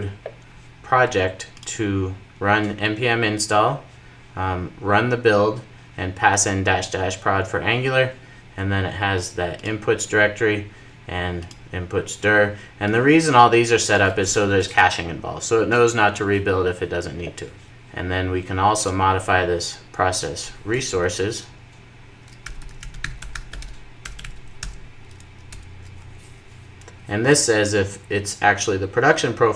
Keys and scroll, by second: 24.8 super+j, 25.7 Return.